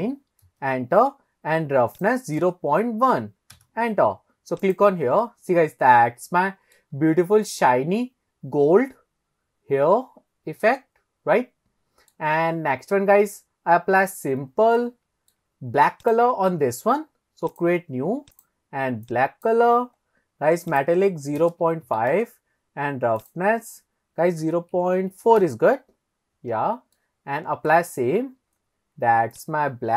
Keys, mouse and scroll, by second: 2.0 click, 4.7 click, 5.2-6.8 middle drag, 7.0-7.4 scroll up 1, 7.5-12.1 middle drag, 13.4-13.9 scroll up 2, 14.8 shift+middle click, 16.0 click, 17.5 click, 18.4 click, 20.0-20.3 scroll down 1, 20.7-22.2 drag, 23.2-25.5 drag, 26.2-26.9 scroll down 1, 26.9 scroll down 1, 27.0-27.7 middle drag, 28.5-28.9 scroll up 2, 29.4 click.